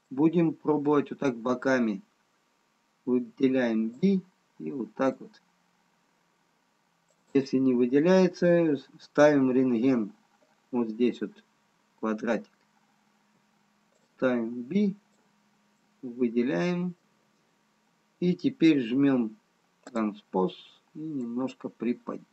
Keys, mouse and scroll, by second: 0.4 middle click, 4.0 b, 7.2 click, 13.2 b, 17.0 middle click, 20.0 click, 21.2 click.